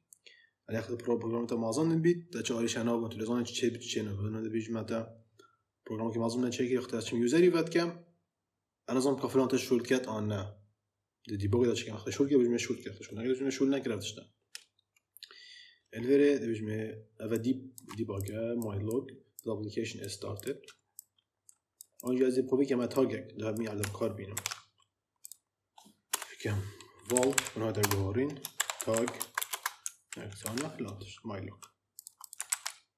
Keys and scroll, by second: 24.2 ctrl+x, 26.0 Return, 26.9-29.7 typing, 30.3 ctrl+v, 32.4 ctrl+c.